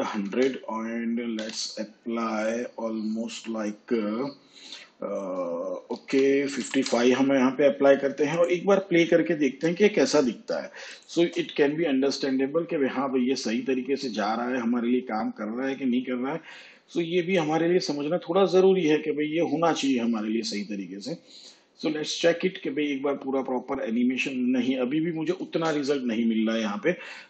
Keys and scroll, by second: 0.0 0, 1.3 ,, 6.6 5, 25.5 space.